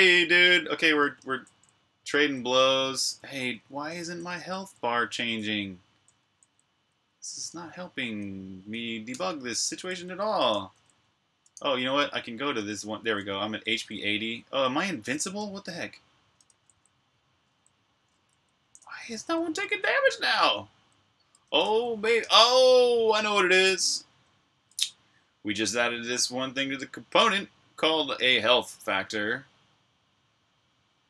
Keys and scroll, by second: 0.9 typing, 2.9-5.9 typing, 7.2 typing, 9.5-9.9 typing, 11.2 typing, 18.5-19.3 typing, 22.1 super+q.